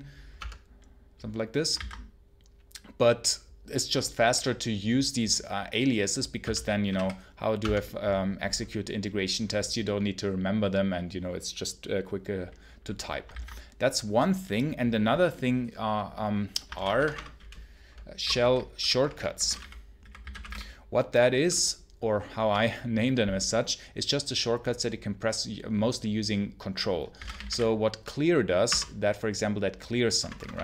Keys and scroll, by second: 0.0-0.2 typing, 1.6 ctrl+c, 6.0-7.5 typing, 13.2 ctrl+c, 16.6 ctrl+l, 16.8 Return, 17.8-21.3 typing, 26.8-27.8 typing, 28.5 Return, 30.1 Return.